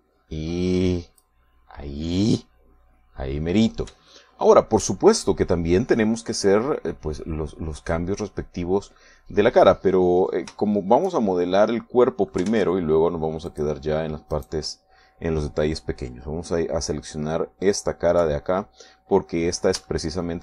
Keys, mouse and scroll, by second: 5.2 shift+middle click, 6.6-8.2 middle drag, 11.7-13.6 shift+middle drag, 13.6 ctrl+Tab, 14.6 click, 15.4 right click, 19.3 KP_3.